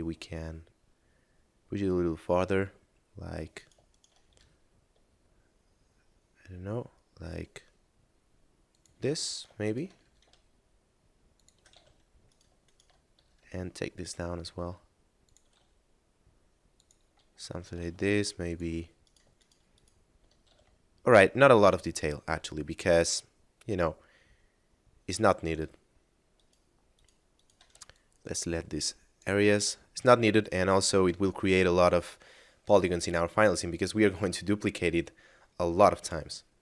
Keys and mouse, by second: 1.9 middle click, 3.4 right click, 3.9 shift+right click, 4.3 e, 8.5 ctrl+click, 9.3 right click, 9.7 shift+right click, 9.9 e, 11.3 ctrl+click, 11.7 a, 12.3 right click, 12.7 shift+right click, 13.1 e, 15.2 ctrl+click, 15.5 s, 16.7 click, 17.1 a, 17.4 middle click, 17.9 ctrl+Tab, 18.4 click, 19.0 right click, 19.4 shift+right click, 19.7 shift+right click, 20.5 a, 20.9 middle click, 25.2 right click, 26.4 shift+right click, 26.9 shift+right click, 27.3 shift+right click, 27.9 ctrl+click, 31.3 middle click, 36.4 middle click.